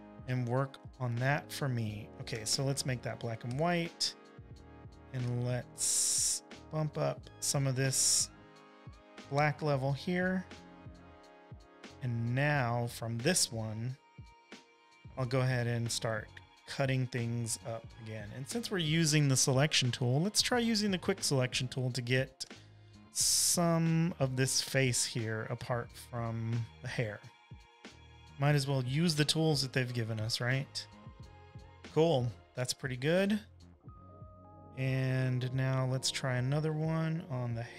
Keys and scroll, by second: 0.9 v, 0.9 space, 1.4 space, 1.5 space, 3.4 v, 4.7 shift+super+u, 5.9 super+l, 16.6 z, 18.0 space, 18.5 space, 18.6 space, 19.7 l, 20.5 w, 24.8-25.5 typing, 35.4 super+j, 36.8 space, 37.0 space, 37.1 space.